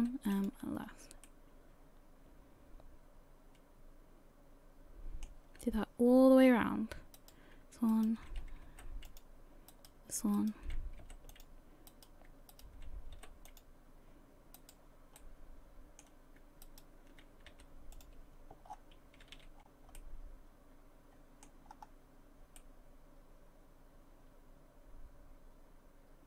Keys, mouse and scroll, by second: 0.0 m, 0.8-1.3 scroll down 3, 1.3 middle click, 5.8-6.4 scroll up 3, 6.4 scroll up 2, 7.2 right click, 7.9 shift+right click, 8.7 m, 9.7 right click, 10.4 shift+right click, 11.0 m, 11.9 right click, 12.5 shift+right click, 13.2 m, 14.6 right click, 15.2 middle click, 16.7 shift+right click, 17.5 m, 18.7-19.2 scroll down 6, 19.2 a, 19.4 a, 19.6-20.0 scroll down 3, 20.0 middle click, 21.7-22.4 scroll up 3, 22.6 middle click.